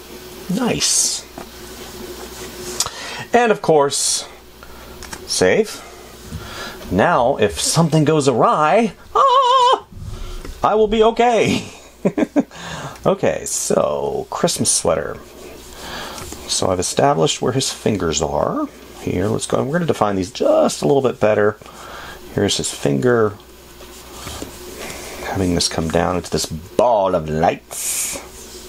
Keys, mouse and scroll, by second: 16.5 space.